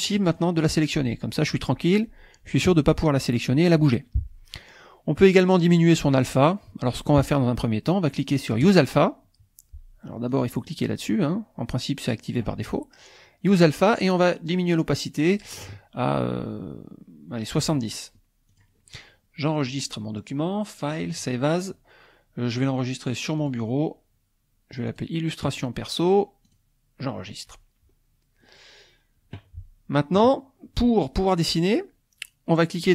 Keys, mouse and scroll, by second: 0.1 click, 8.6 click, 10.3 click, 14.7-17.8 drag, 19.7 click, 21.1 click, 23.4 click, 24.9 click, 26.4 click, 28.0 scroll up 1.